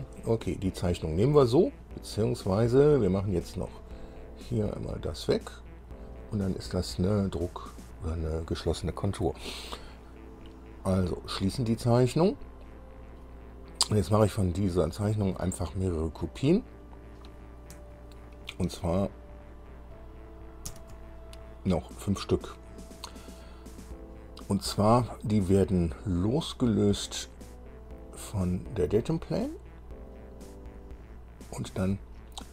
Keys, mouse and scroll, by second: 1.4-1.7 scroll up 2, 4.0 click, 5.7 click, 12.1 click, 15.0-15.3 scroll down 1, 20.9 ctrl+c, 27.1 click, 27.8 click, 28.7 click, 31.2 click.